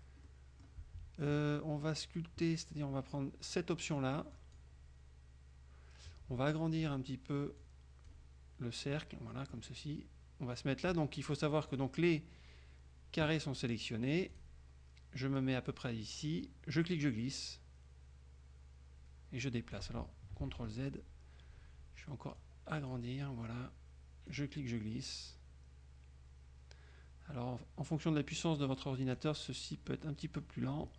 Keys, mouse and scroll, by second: 0.4 click, 4.5 click, 7.7 click, 9.1 click, 11.9 click, 14.5 click, 16.9-20.1 drag, 20.5 ctrl+z, 22.5 click, 24.4-29.5 drag, 30.0 click.